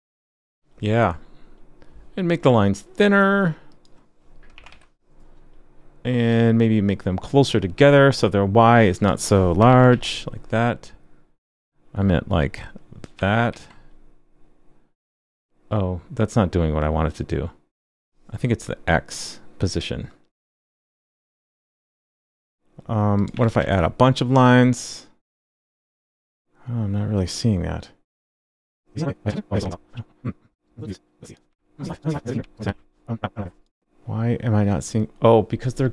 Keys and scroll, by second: 4.7 super+s, 9.9 super+s, 13.5 super+s, 23.6 super+s, 29.6 super+s, 31.5 super+s, 32.3 super+s, 32.7 super+s.